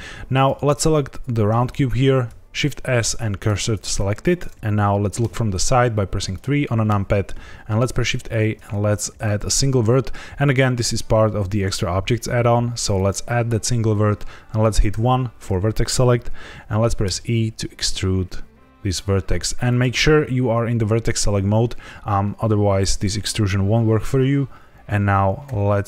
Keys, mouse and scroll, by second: 0.3 click, 2.2 shift+s, 5.1 KP_3, 6.1-6.5 scroll down 1, 6.5 shift+middle click, 7.8 shift+a, 14.8 1, 17.0 e, 19.6 click, 25.4 e.